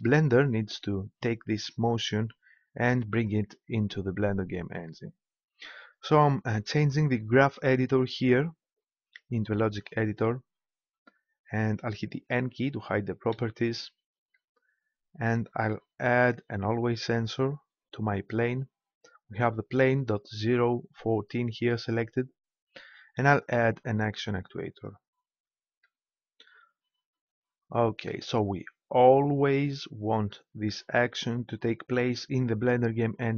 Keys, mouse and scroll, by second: 13.3 n, 16.0 click, 23.3-25.0 drag, 29.1-31.1 drag.